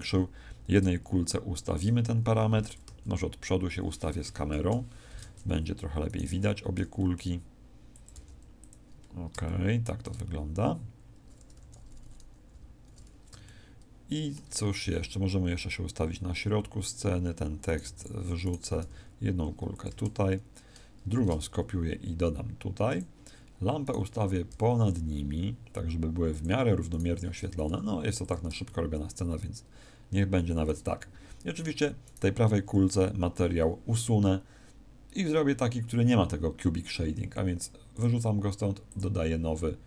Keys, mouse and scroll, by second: 2.8 KP_1, 4.5 ctrl+shift+KP_0, 6.0 right click, 6.7 g, 8.0 click, 8.0 g, 8.6 click, 9.0-10.2 scroll down 3, 9.4 shift+middle click, 10.2-11.0 scroll up 1, 11.0 scroll up 1, 11.4 t, 12.4 n, 13.4 shift+middle click, 14.8 g, 16.8 click, 17.6 right click, 17.8 x, 18.4 right click, 18.7 g, 19.8 click, 21.1 shift+d, 22.9 click, 23.8 right click, 24.4 g, 26.3 click, 26.8 right click, 27.6 g, 28.2 click, 28.6 shift+middle click, 32.0 right click, 37.8 click, 38.8 click.